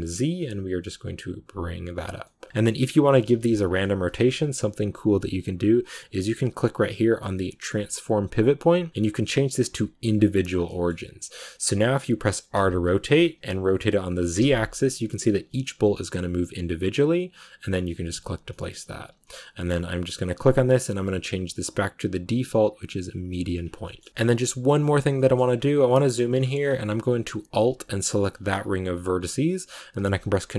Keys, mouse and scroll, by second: 2.1 middle click, 3.0 g, 10.0 click, 10.4 scroll down 1, 10.6-12.4 middle drag, 12.4 r, 18.4 middle click, 19.0 a, 23.5 scroll down 1, 23.7-25.2 middle drag, 25.2-25.8 scroll up 3, 25.8 shift+middle click, 26.5-28.2 scroll up 1, 28.2 alt+right click, 29.9 ctrl+b.